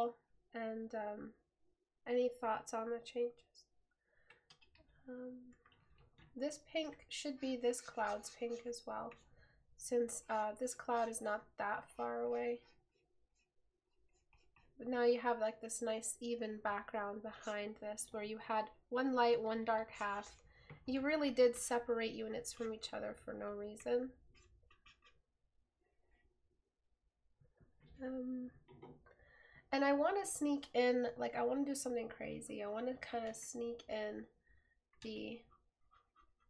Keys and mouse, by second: 5.1 right click.